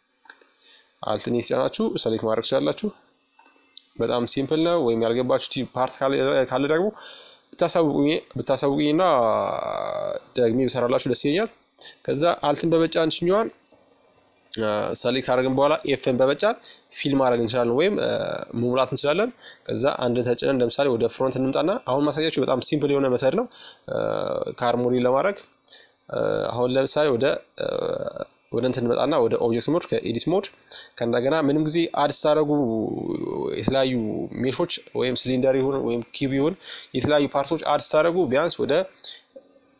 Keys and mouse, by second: 1.0-2.8 right drag, 2.1-4.3 drag, 4.3 middle click, 8.8-11.5 right drag, 10.4-14.1 middle drag, 13.5 f, 14.9-16.6 middle drag, 16.6-18.2 drag, 16.9 KP_1, 18.3-20.1 drag, 20.1 middle click, 20.6 z, 23.1-25.4 drag, 25.4-27.1 middle drag, 28.3-30.2 middle drag, 29.0-33.3 drag.